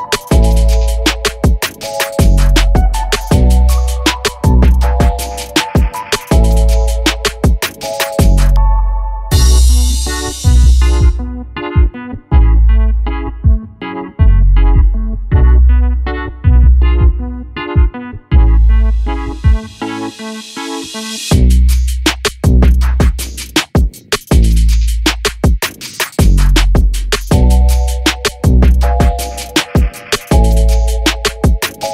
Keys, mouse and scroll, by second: 0.4 r, 1.9 alt+d, 2.6 r, 4.8 alt+a, 5.1 click, 5.4 click, 6.0 click, 6.5 r, 7.5 click, 7.8 click, 8.5 g, 9.9 g, 10.1 r, 11.4 click, 11.8 click, 12.1 r, 14.4 click, 14.8 r, 16.4 click, 16.7 g, 17.5 g, 18.3 g, 19.5 click, 19.6 shift+click, 19.8 shift+click, 20.1 click, 20.6 click, 21.3 r, 22.6 g, 23.9 r, 24.3 click, 24.6 click, 25.2 g, 25.7 r, 26.8 click, 26.8 g, 27.4 r, 28.1 click, 28.3 click, 28.7 click, 29.5 r, 30.6 g, 31.0 click, 31.3 click, 31.4 g, 31.8 r.